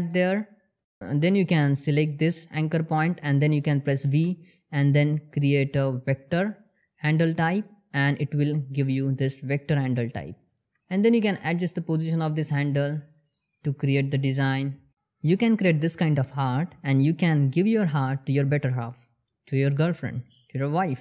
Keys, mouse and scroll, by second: 0.0 ctrl+x, 0.6 scroll down 1, 0.8 click, 2.5 scroll up 1, 5.4 v, 8.6 click, 10.8 ctrl+middle click, 11.1 click, 11.6 g, 11.8 click, 12.1 g, 13.4 g, 14.3 click, 14.6 g, 15.3 click, 16.6 scroll down 1, 17.1 click, 17.9 g, 18.6 click, 20.1 r, 20.5 click.